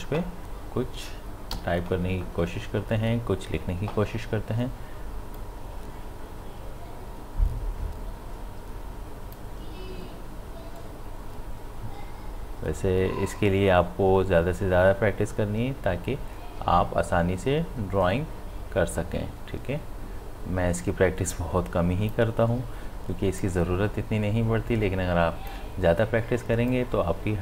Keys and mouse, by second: 1.5 b, 5.4-20.7 drag, 23.4-27.4 drag.